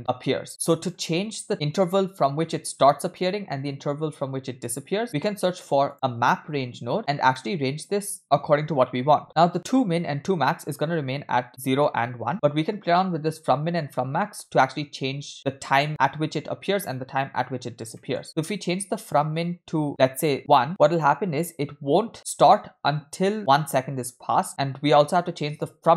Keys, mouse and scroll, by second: 0.5 click, 5.0 scroll down 2, 5.1 shift+a, 7.9 click, 8.2-9.2 scroll up 3, 18.0 middle click, 18.2-19.4 scroll up 1, 19.4-20.4 drag, 21.1 click, 25.5-25.9 drag.